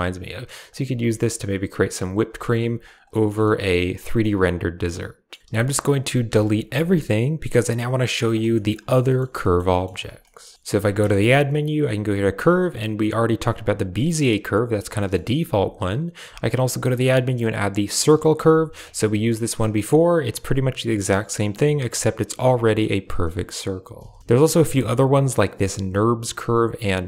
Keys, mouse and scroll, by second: 0.0 Tab, 0.0 a, 0.6 click, 0.7 Tab, 1.1 click, 1.1 right click, 1.8 right click, 2.1 r, 2.4 g, 2.9 click, 3.2 Tab, 3.3-3.8 drag, 4.1-5.2 drag, 5.3-6.6 typing, 5.4 ctrl+s, 7.7 click, 8.4 shift+click, 8.9 shift+click, 9.3 shift+click, 9.6 drag, 9.8 shift+c, 10.1 shift+drag, 10.9 shift+a, 13.6 typing, 13.8 drag, 14.9 drag, 15.3-16.3 typing, 18.7 Tab, 18.8 middle click, 19.7 click, 20.1 g, 21.4 click, 21.7 g, 22.2 Tab, 22.6-23.1 middle drag, 23.8-24.2 typing.